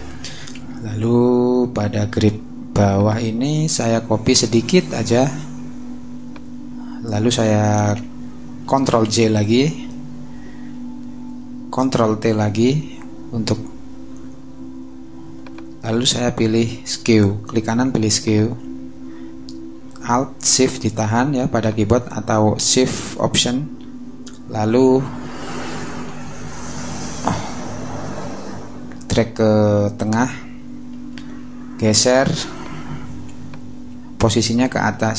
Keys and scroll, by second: 0.5 m, 9.0 super+j, 11.7 super+t, 12.6 alt+super+t.